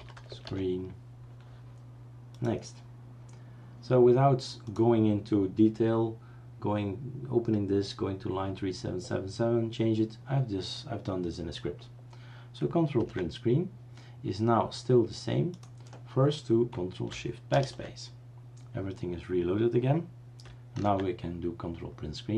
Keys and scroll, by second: 0.0-0.9 typing, 13.0 ctrl+Print, 17.5 ctrl+shift+BackSpace, 20.8 ctrl+Print.